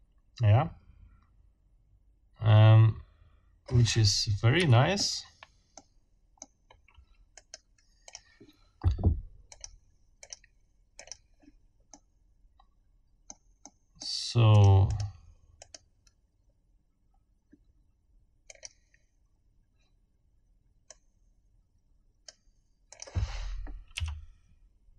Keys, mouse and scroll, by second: 4.5 Escape, 5.8 click, 6.7 scroll up 1, 7.3 right click, 8.1 click, 9.5 click, 10.2 click, 11.0 click, 11.9-13.5 middle drag, 13.6 middle click, 14.5 click, 14.9 right click, 15.6 right click, 16.5 scroll up 2, 18.5 click, 20.9-22.5 right drag, 22.9 click, 23.9 r.